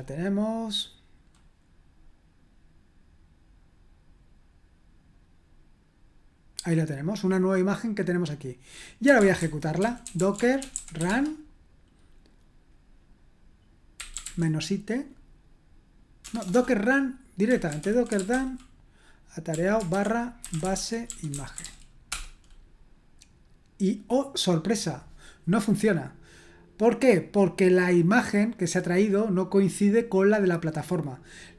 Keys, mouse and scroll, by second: 8.8-11.5 typing, 13.7-14.7 typing, 16.2-22.1 typing, 27.2-31.5 drag.